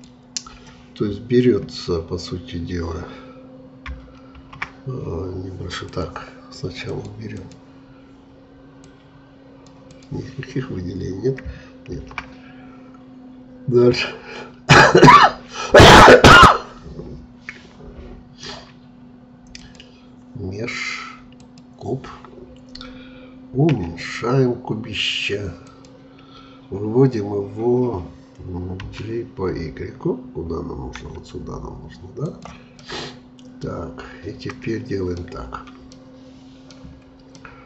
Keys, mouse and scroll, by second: 4.3 shift+a, 5.9-11.9 drag, 11.9 shift+a, 23.7 s, 28.8 g, 32.7-34.0 middle drag, 34.0-34.5 scroll up 2, 34.5-35.5 middle drag, 35.5-35.9 scroll up 2, 35.9-36.9 middle drag, 36.9-37.2 scroll down 3, 37.3-37.6 middle drag.